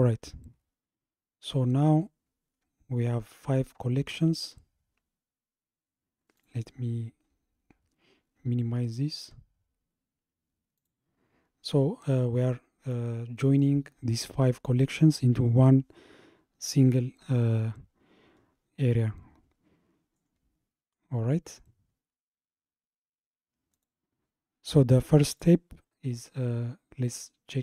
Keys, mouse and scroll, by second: 1.3-5.7 scroll up 67, 6.4 click, 7.0-9.4 scroll up 48, 10.8 click, 20.2-20.6 scroll up 3, 21.1-21.6 scroll down 2, 21.6-22.4 scroll up 2, 23.8 click, 25.3 click.